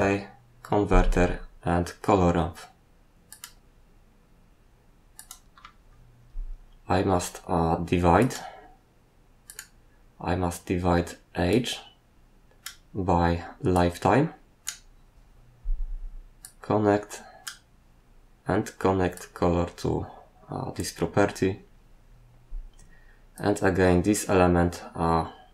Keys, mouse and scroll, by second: 3.3 click, 5.1 click, 8.2 click, 9.4 click, 9.5 click, 11.5 click, 13.7 click, 16.4 click, 19.2 click, 23.3 click.